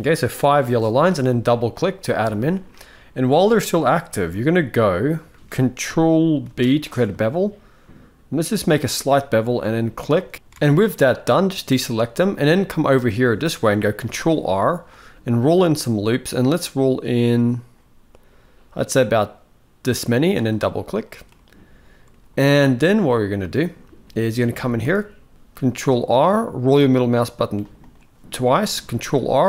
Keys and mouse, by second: 2.4 middle click, 4.0 shift+middle click, 5.0 shift+middle click, 6.2 ctrl+b, 10.3 alt+a, 11.6 middle click, 12.3-12.7 middle drag, 13.7 ctrl+r, 20.9-21.8 middle drag, 22.3-22.8 middle drag, 23.2 shift+middle click, 24.5 ctrl+r, 28.5 ctrl+r.